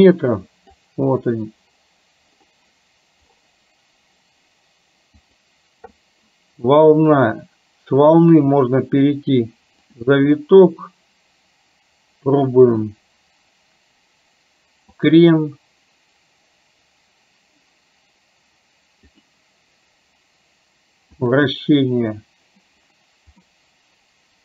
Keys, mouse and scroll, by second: 7.3-10.1 drag, 12.9-15.3 drag, 19.2-21.5 drag, 23.5-24.4 middle drag.